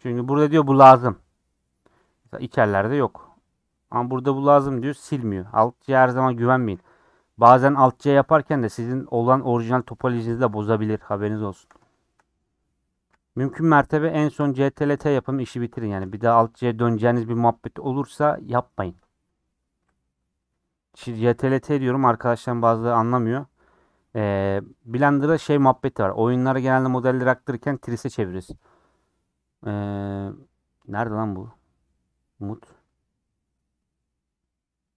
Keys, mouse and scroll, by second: 0.1-8.3 middle drag, 8.3 scroll down 3, 10.7 Tab, 11.1 scroll down 4, 11.3-13.1 shift+middle drag, 13.1 /, 13.6 middle click, 13.9-14.6 scroll up 5, 14.1 shift+middle click, 14.8 middle click, 15.5 scroll up 1, 15.9-24.8 shift+middle drag, 24.8 Tab, 25.6 a.